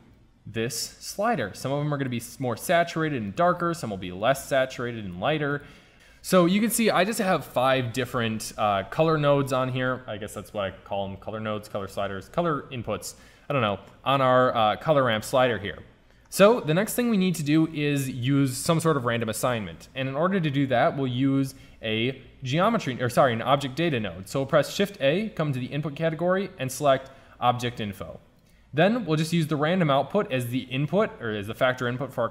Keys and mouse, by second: 21.3 shift+a, 28.6-31.0 drag.